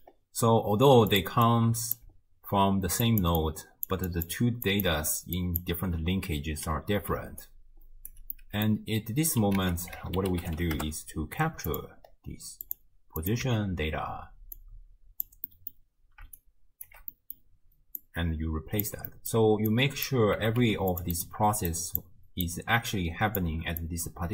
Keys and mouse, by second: 0.0-5.9 typing, 0.0 click, 1.6 click, 3.2 click, 3.8 click, 4.1 click, 4.7 click, 5.6 click, 7.1 d, 7.4 click, 8.1 d, 8.5 middle click, 9.6 ctrl+a, 12.7 click, 13.2 click, 14.7-15.4 drag, 15.5 middle click, 16.4 shift+right click, 17.2 middle click, 18.2-18.9 right drag, 19.2 middle click, 19.7 right click, 20.4 g, 21.7 click, 22.6 click, 23.5 d, 23.8-24.3 drag.